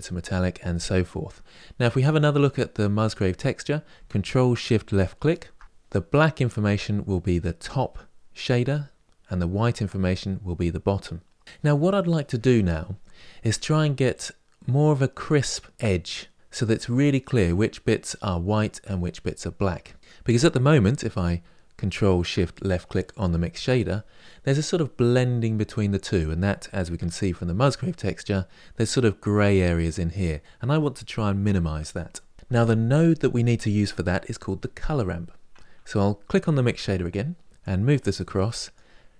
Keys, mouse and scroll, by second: 4.9 ctrl+shift+click, 22.9 ctrl+shift+click, 26.9 ctrl+shift+click, 37.4 click.